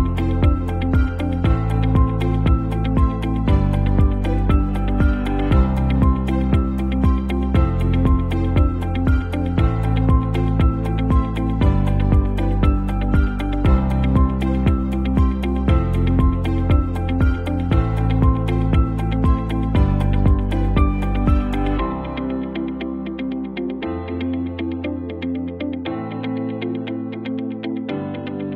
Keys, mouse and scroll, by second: 0.5 click, 2.2 ctrl+z, 2.9-6.0 drag, 8.4 t, 9.2 click, 12.2-15.4 typing, 16.6 click, 17.4 ctrl+t, 18.2-19.0 drag, 25.8 v, 26.7 click.